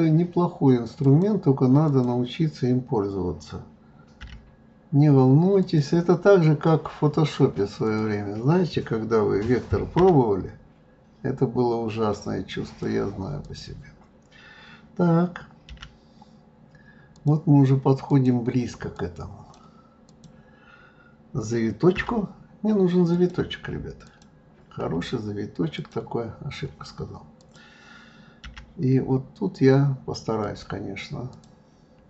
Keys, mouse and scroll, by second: 1.8 click, 4.2 g, 7.8 click, 9.9 g, 13.4 click, 15.7 g, 18.0 click, 18.9 click, 20.0 click, 21.9 g, 24.0 click, 25.0 f, 27.4 click, 28.4 g, 31.3 click.